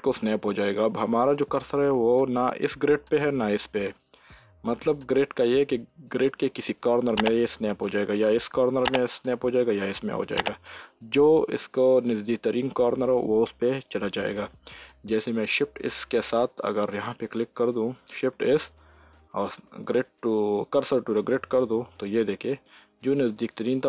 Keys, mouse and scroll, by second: 15.6 shift+s, 18.1 shift+s.